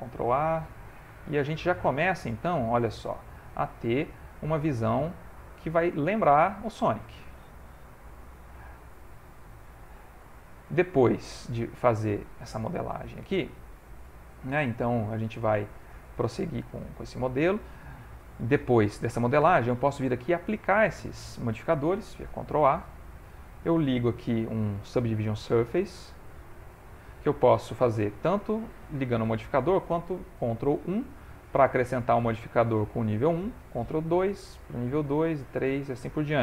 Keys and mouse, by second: 0.2 ctrl+a, 2.3 click, 2.9 g, 4.1 middle click, 4.9 z, 5.1 middle click, 6.0 ctrl+middle click, 6.3 middle click, 8.4 ctrl+a, 9.6 click, 10.2 middle click, 11.5 ctrl+middle click, 12.2 shift+middle click, 12.6 middle click, 13.7 ctrl+middle click, 14.1 shift+middle click, 14.6 ctrl+middle click, 15.2 Tab, 16.3 ctrl+middle click, 16.7 ctrl+middle click, 22.5 ctrl+a, 22.9 ctrl+a, 25.5 click, 29.2 click, 30.9 ctrl+1, 34.1 ctrl+2, 35.2 ctrl+3, 35.9 middle click.